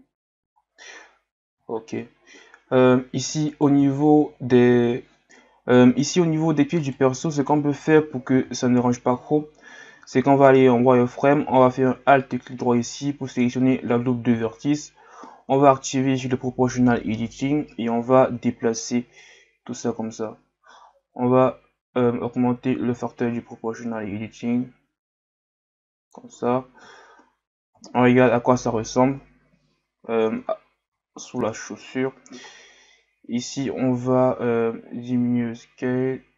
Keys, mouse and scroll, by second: 0.6 scroll down 1, 0.9-1.7 scroll up 2, 1.7-3.5 scroll up 10, 3.5 right click, 3.8 Tab, 6.7 alt+right click, 7.3 alt+right click, 8.3 z, 8.9-10.0 scroll down 2, 10.0 z, 10.4 scroll up 2, 11.7-12.8 scroll down 2, 14.3 z, 15.0-15.7 scroll down 1, 15.7-16.9 scroll up 1, 17.1 o, 18.2-19.2 scroll down 1, 19.2-22.3 drag, 27.0-27.4 scroll down 2, 27.4 scroll up 2, 29.1 KP_Divide, 30.1 z, 30.5-31.3 scroll down 1, 31.3 scroll down 10, 31.6-32.0 scroll up 3, 32.5-32.9 scroll down 3, 33.2 r.